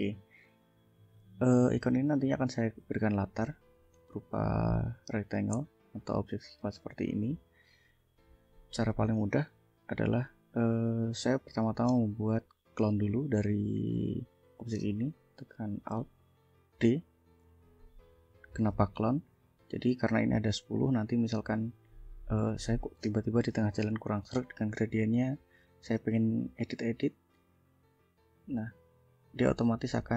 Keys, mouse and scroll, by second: 0.0 click, 0.6 ctrl+click, 1.9-3.7 drag, 3.9 click, 5.1-6.1 drag, 6.2 click, 8.3-9.4 ctrl+drag, 16.8 alt+d, 17.7 ctrl+click, 19.9-20.9 ctrl+drag, 22.4 click, 24.0 g, 24.8 click, 27.7-29.8 drag.